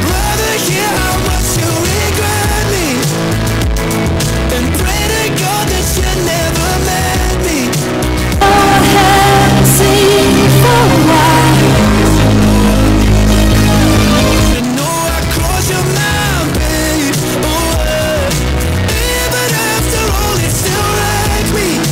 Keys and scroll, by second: 14.5 Page_Down.